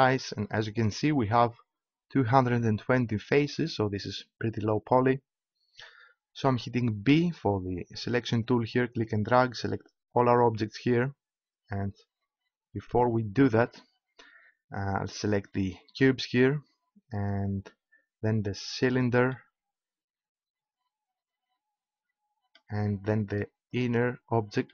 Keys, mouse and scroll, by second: 7.0 b, 15.1-17.5 right drag, 18.8-20.5 right drag, 23.7-24.7 right drag.